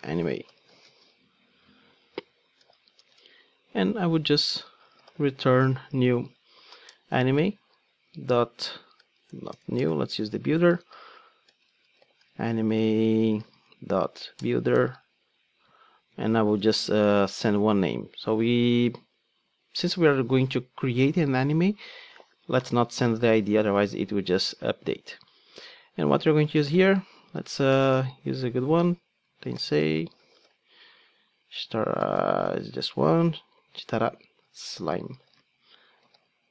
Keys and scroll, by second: 6.9 Return, 9.3 alt+BackSpace, 14.4 Return.